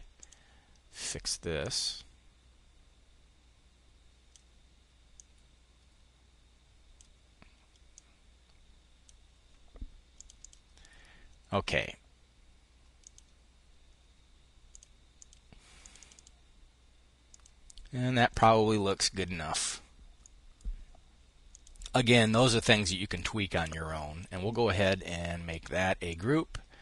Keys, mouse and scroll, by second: 1.1-7.1 drag, 7.4-10.4 drag, 12.5 click, 14.2-15.4 drag, 15.6 click, 16.8 click, 19.7-20.9 drag, 21.7 click, 22.4-23.9 drag, 24.9-25.9 drag, 26.7-26.8 drag.